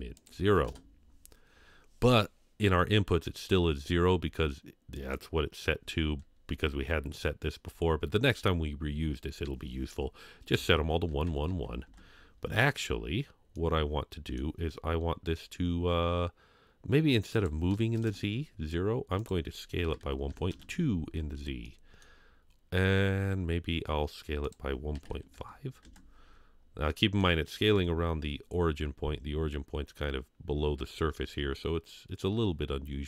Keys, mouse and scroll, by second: 0.1 click, 4.9-11.8 drag, 13.5-14.4 middle drag, 17.3 click, 19.2-20.5 drag, 21.6-22.0 middle drag, 22.2 scroll up 2, 24.7-25.8 drag, 26.5 scroll down 2, 26.9-27.2 middle drag, 27.7 KP_3, 28.2 scroll up 2, 31.2 scroll down 1, 31.5-32.2 middle drag.